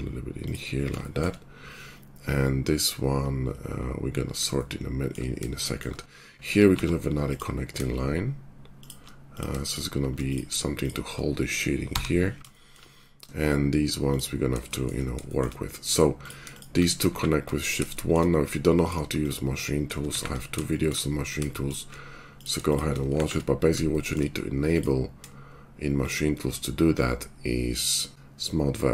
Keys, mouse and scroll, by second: 4.6-6.4 shift+middle drag, 6.7 ctrl+r, 6.8-9.2 middle drag, 9.3-14.0 shift+middle drag, 14.0 click, 14.1-16.1 middle drag, 16.1 click, 16.2-19.1 shift+middle drag, 17.0 shift+1, 19.1 shift+click, 19.2-22.6 shift+middle drag, 20.0 shift+1, 22.6 shift+click, 22.7-26.0 shift+middle drag, 23.1 shift+1, 26.0 shift+click, 26.0-28.9 shift+middle drag.